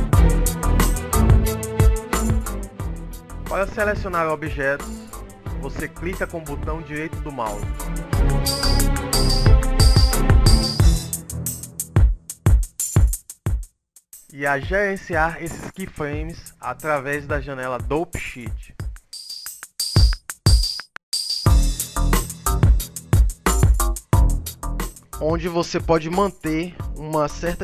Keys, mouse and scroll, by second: 0.0 KP_Subtract, 0.3 KP_Add, 0.5 KP_Subtract, 0.8 KP_1, 0.9 KP_3, 1.2 KP_7, 1.7 ctrl+KP_1, 1.9 ctrl+KP_3, 2.4 scroll up 4, 2.9 KP_5, 3.0 scroll down 7, 3.1 KP_5, 3.3-4.2 scroll down 7, 4.8-5.6 scroll up 2, 7.1 right click, 8.1 right click, 8.3 right click, 8.4 right click, 8.5-8.9 right click, 9.0 click, 9.1 click, 9.2 click, 9.2 click, 9.4 click, 9.6 click, 9.7 click.